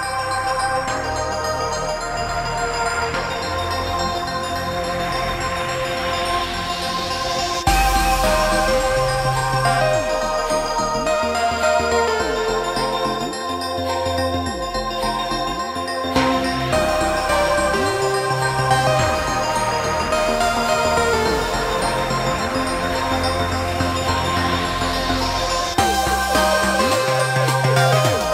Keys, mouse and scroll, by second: 1.8 ctrl+g, 3.1 shift+middle click, 4.9 alt+t, 5.8 shift+middle click, 19.3 space, 20.8 m, 24.7 Escape, 26.0 t.